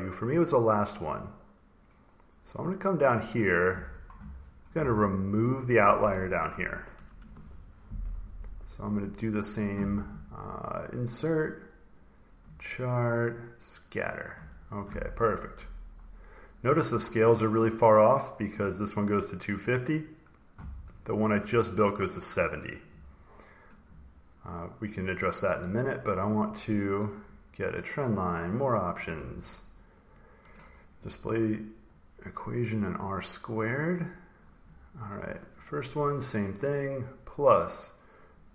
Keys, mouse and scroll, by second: 1.2-2.7 scroll down 4, 2.7-4.7 scroll down 1, 5.7 click, 6.9 Delete, 9.2 click, 10.8 click, 11.9 click, 13.7 click, 15.0-16.8 ctrl+scroll, 17.6-18.0 scroll, 19.8 click, 20.7 click, 21.2 click, 24.8 click, 25.3 click, 26.3 click, 27.7 click, 28.5 click, 30.0 click, 32.4 click, 34.3 click, 35.4 click, 35.7-36.3 scroll, 36.6 click.